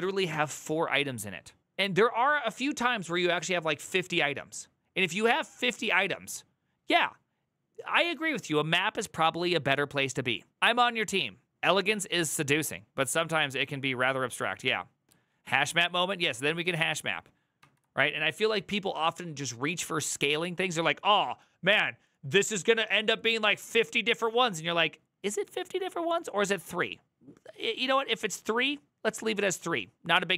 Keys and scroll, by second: 17.3 alt++.